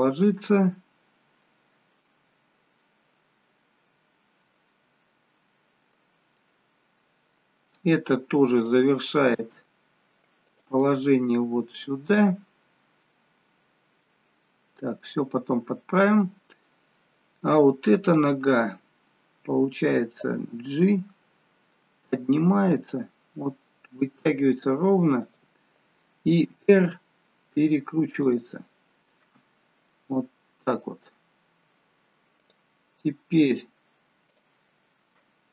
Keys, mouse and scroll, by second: 6.3 middle click, 7.9 middle click, 8.6 click, 9.4 g, 10.8 middle click, 14.4-15.6 scroll up 2, 14.7 middle click, 15.6 scroll down 2, 15.9 middle click, 16.8-17.8 scroll down 1, 18.2 click, 20.3 g, 26.5 r, 29.2 middle click, 32.4 click, 34.3 shift+click.